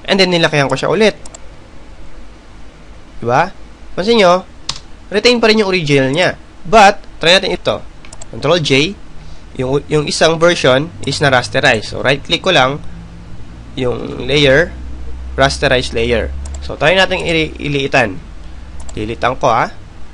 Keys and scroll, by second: 4.5 Return, 8.9 ctrl+j.